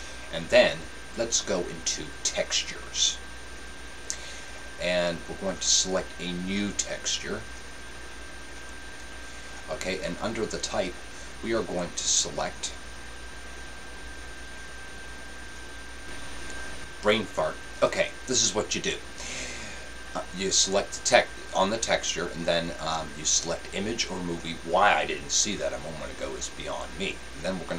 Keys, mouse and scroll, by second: 6.0-16.5 drag.